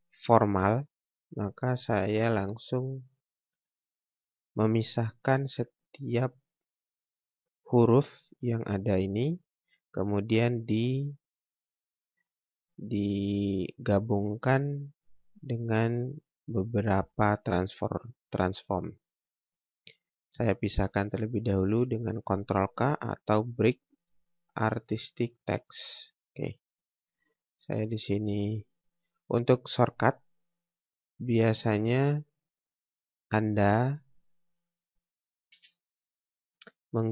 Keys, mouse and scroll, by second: 20.1 click, 25.3 click, 26.6 click, 26.7 scroll down 1, 30.4 click, 32.3 scroll down 1, 32.5 scroll up 1, 33.7 click, 35.5 space, 36.2-37.1 scroll up 1.